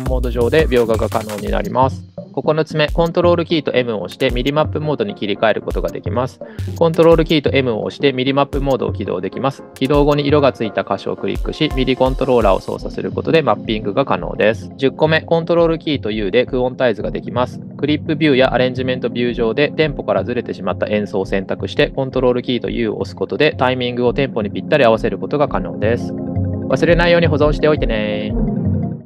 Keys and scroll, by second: 2.2 super+m, 3.1 super+m, 3.9 super+m, 4.8 super+m, 5.5 super+m, 6.3 super+m, 14.6 super+u, 16.3 super+u, 18.1 super+u, 22.4 super+u, 24.3 super+a, 25.1 super+u.